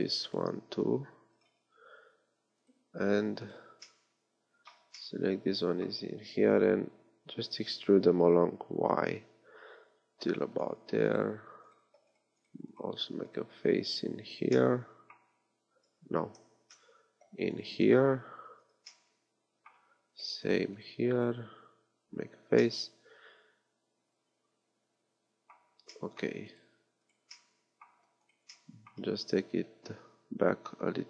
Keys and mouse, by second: 0.9 x, 7.5 e, 14.4 f, 16.7 ctrl+z, 18.6 f, 22.3 f, 26.0-28.6 middle drag, 28.7 middle click, 29.7-31.0 middle drag.